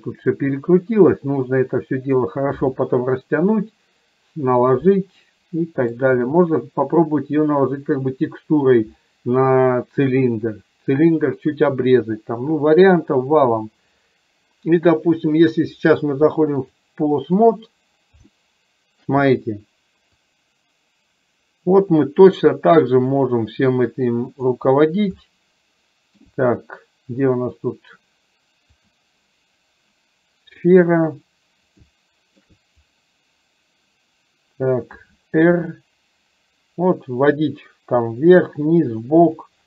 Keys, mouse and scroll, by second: 5.3-6.0 middle drag, 16.8 click, 18.4-19.2 shift+middle drag, 20.4-24.5 drag, 25.3-26.2 shift+middle drag, 30.7 click, 32.0-32.5 shift+middle drag, 35.7 r.